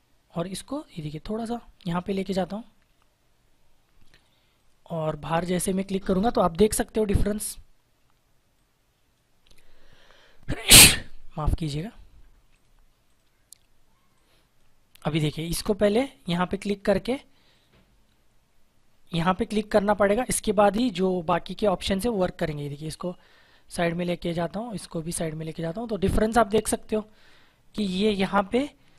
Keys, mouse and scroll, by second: 8.5 click, 12.4 click, 20.6 click, 24.0 click, 27.6 click.